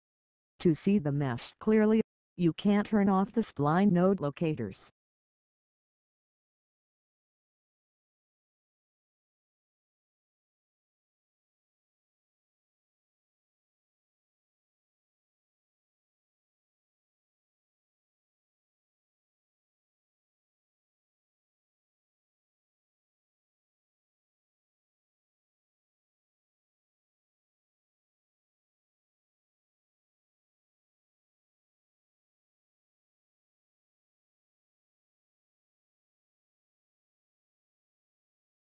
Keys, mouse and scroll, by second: 2.8 click, 11.2 click, 21.3 scroll up 1, 22.0 scroll down 1, 25.0 scroll down 1, 27.3 click, 32.1-33.2 scroll up 1, 34.0 click, 37.6-38.0 scroll up 1.